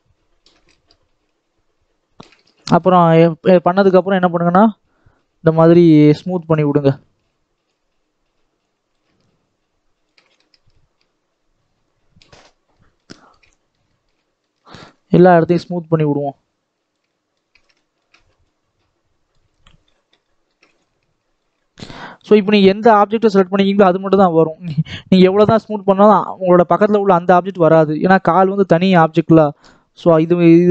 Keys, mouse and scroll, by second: 2.3 middle click, 3.2 scroll up 2, 3.5 middle click, 3.9-5.9 shift+drag, 5.9 middle click, 6.6-12.3 shift+drag, 12.3-12.7 scroll down 5, 12.7-14.8 middle drag, 14.8-15.3 scroll up 3, 15.3-17.1 shift+drag, 17.1 middle click, 17.4 scroll down 2, 17.7 shift+middle click, 18.1-18.4 scroll up 2, 18.4-19.4 shift+drag, 19.4 scroll down 1, 19.7-20.9 middle drag, 20.9 shift+click, 21.5-22.9 middle drag, 22.9-27.5 shift+drag, 27.5-28.6 shift+middle drag, 28.6-30.7 shift+drag.